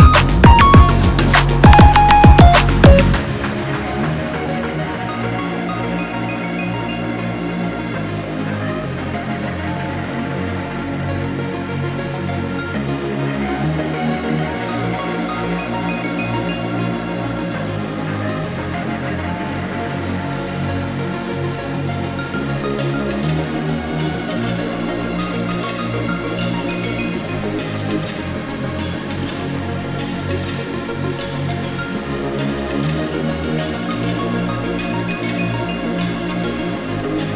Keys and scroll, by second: 4.4 ctrl+z, 5.4 ctrl+z, 8.3 ctrl+z, 8.9 ctrl+z, 26.6 ctrl+d.